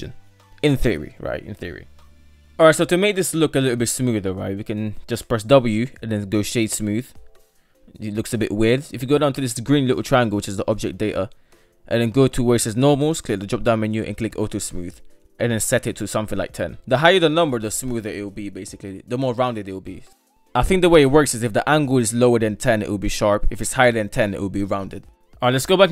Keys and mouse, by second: 2.4 shift+middle click, 3.5 shift+middle drag, 5.3 w, 7.4-8.0 middle drag, 12.7 click, 13.1 click, 14.2 click, 16.3-20.2 drag, 20.3-21.9 drag, 22.8-25.2 middle drag.